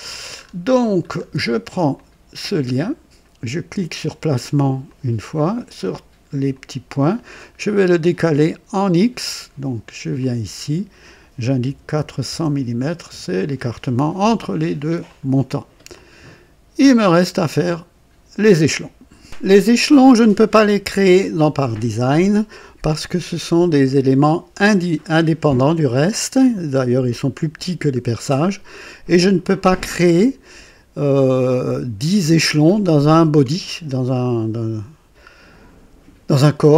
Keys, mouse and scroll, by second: 0.0-0.6 alt+scroll down 3, 1.0 alt+scroll down 1, 1.9 alt+click, 4.8 click, 6.4 click, 10.1 click, 11.6 KP_4, 11.9 KP_0, 12.2 KP_0, 13.0 Return, 14.2 scroll down 2, 15.0 click, 15.8-17.1 drag, 17.3 click.